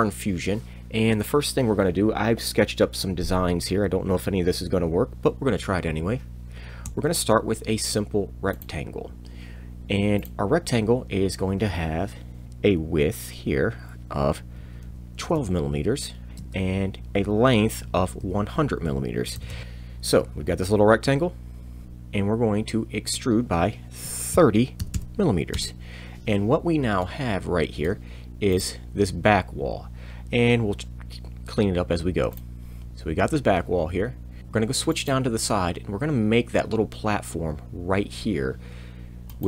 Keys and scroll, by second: 6.9 r, 14.8 2, 15.2 m, 16.3 Tab, 17.8 1, 18.1 0, 19.3 m, 19.6 Return, 21.8 e, 21.8 z, 24.3 0, 24.8 m, 25.5 Return.